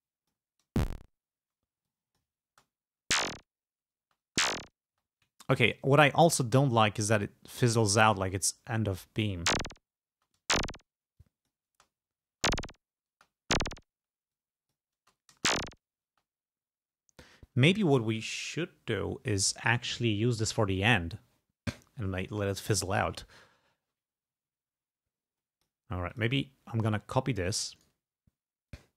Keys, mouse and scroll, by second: 0.1 click, 0.8 space, 2.0 click, 2.5 space, 4.1 space, 7.0-8.3 drag, 9.4 space, 10.2 space, 11.3 click, 11.8 space, 12.4 space, 13.2 space, 14.5 click, 15.1 space, 16.2 space, 25.5 click, 26.2 click, 27.6 double click, 28.8 click.